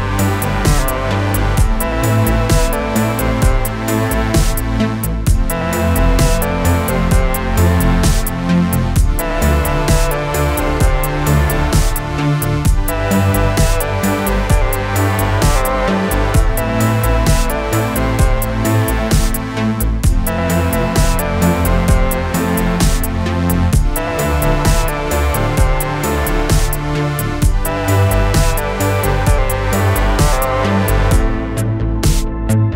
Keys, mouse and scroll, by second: 1.8 Return, 3.1 click, 5.0 Return, 6.5 click, 9.5-13.1 typing, 13.9 click, 14.9-16.7 typing, 17.9 click, 24.2 click, 30.5 click.